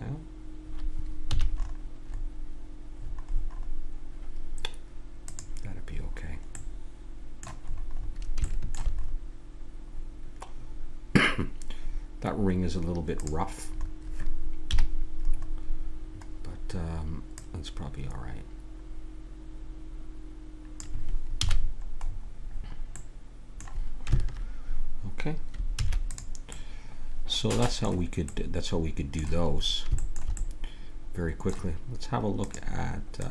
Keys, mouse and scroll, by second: 1.3 a, 1.5-4.7 middle drag, 5.3-7.1 drag, 7.1-11.8 middle drag, 13.2-14.9 drag, 14.7 KP_Decimal, 15.7-17.3 middle drag, 17.3-19.3 drag, 21.4 a, 21.6-24.8 middle drag, 25.8 ctrl+s, 26.5-29.0 middle drag, 30.8-32.6 middle drag.